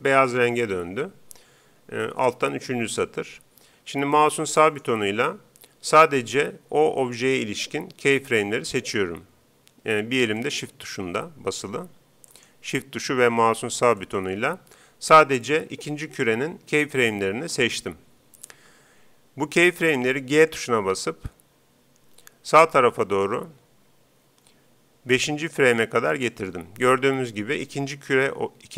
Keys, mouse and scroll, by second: 4.7-6.3 right drag, 7.0-9.9 right drag, 10.4-12.0 right drag, 13.8-15.6 right drag, 15.8 right click, 20.3 g, 26.3-28.0 drag.